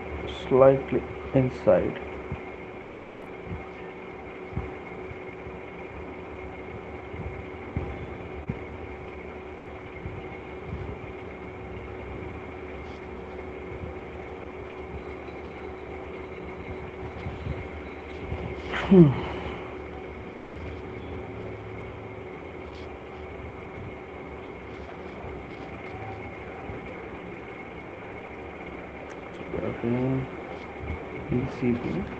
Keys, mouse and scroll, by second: 2.4 click, 4.1 click, 6.2 right click, 8.9 click, 10.7 click, 12.2 click, 13.2 click, 14.4 right click, 15.9 shift+click, 16.1 shift+click, 17.0 right click, 21.2 alt+click, 25.0 click, 25.2 click, 25.6-28.3 typing, 29.2-31.7 click, 30.1 ctrl+z, 31.4-32.0 typing.